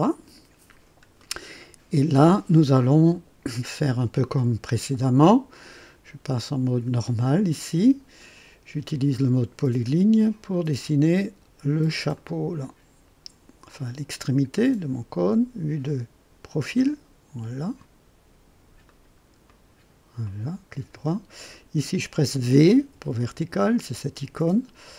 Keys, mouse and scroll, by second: 0.6 scroll up 1, 1.2-2.0 right drag, 7.0 click, 8.8 click, 12.1 click, 14.5 click, 16.7 click, 18.8 click, 19.4 right click, 20.2 right click, 21.5 click, 22.7 v.